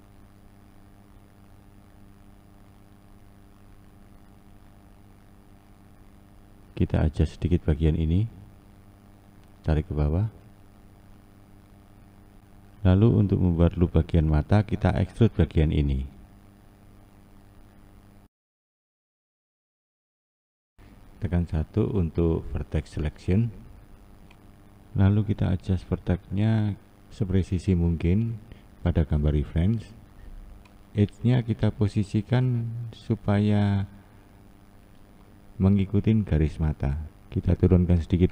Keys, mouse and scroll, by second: 0.9 e, 8.7 click, 9.6 click, 11.5-12.0 scroll down 2, 12.0-12.4 scroll up 1, 12.4 2, 13.1 click, 14.3 e, 20.1-20.9 scroll up 3, 20.9-24.0 shift+middle drag, 24.0 1, 25.2 click, 25.9 click, 29.3 click, 30.0 click, 30.6 click, 31.9 click, 36.0 click, 36.8 click.